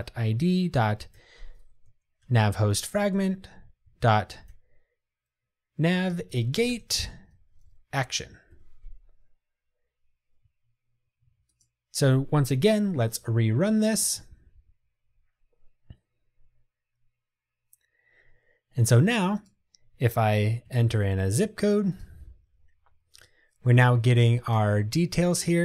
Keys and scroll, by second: 2.4 Return, 8.6 Escape, 11.6 ctrl+r.